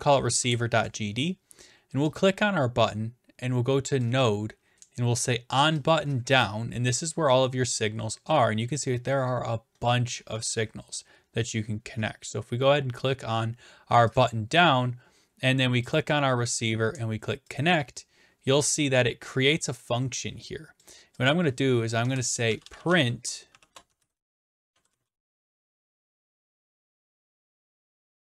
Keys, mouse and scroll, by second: 0.2 Return, 2.2-3.3 drag, 4.0-5.1 drag, 5.9 click, 8.2-9.6 scroll down 6, 9.6-10.9 scroll down 1, 9.7 click, 14.2 click, 14.3 click, 15.9 click, 17.6 click, 20.8 click, 21.3 click, 22.1 Return, 22.2-23.7 typing, 26.1-28.3 typing.